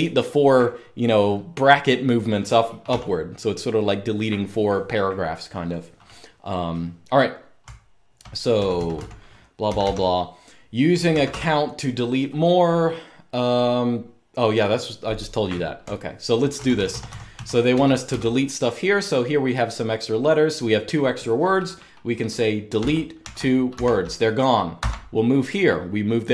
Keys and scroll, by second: 2.6 u, 7.3-9.5 typing, 10.6-11.5 typing, 15.5-17.9 typing, 22.5-23.4 typing, 24.5 typing.